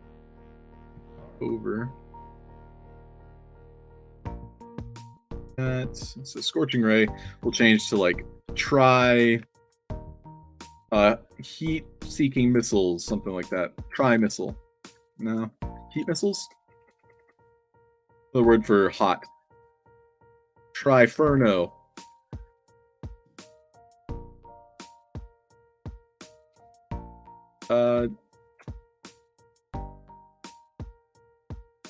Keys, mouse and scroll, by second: 0.0 alt+click, 0.4 d, 0.7 w, 2.0 shift+click, 2.8 click, 4.3 click, 4.6 a, 5.3 click, 6.1 click, 7.0 middle click, 8.2 click, 20.8-23.4 typing, 24.8 i, 25.9-27.3 typing, 30.8 r, 31.6 space.